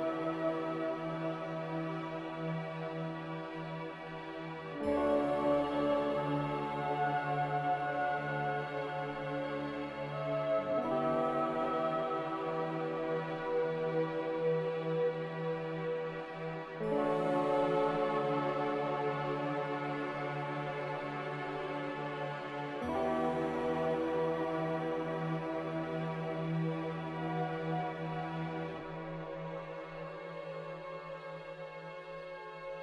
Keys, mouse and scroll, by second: 6.2 typing, 6.4 Return, 12.5 a, 15.3 ctrl+c, 15.5 ctrl+v, 22.3 s, 22.8 a, 24.2-27.6 typing, 29.8 m, 31.7 Escape, 31.8 Escape, 32.3 x.